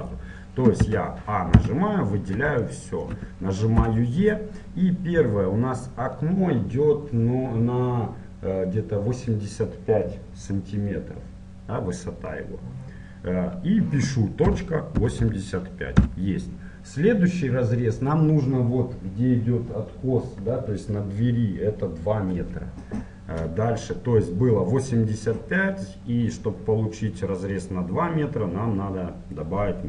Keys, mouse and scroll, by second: 0.9 a, 1.6 a, 3.8 e, 27.2-29.8 middle drag.